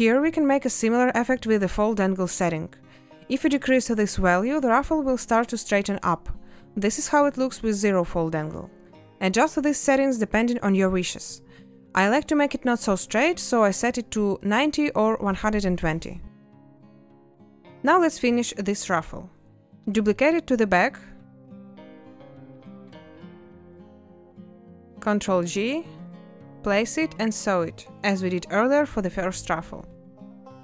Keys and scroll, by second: 2.3 0, 2.5 Return, 11.9 0, 12.0 Return, 19.0 a, 25.5 ctrl+8.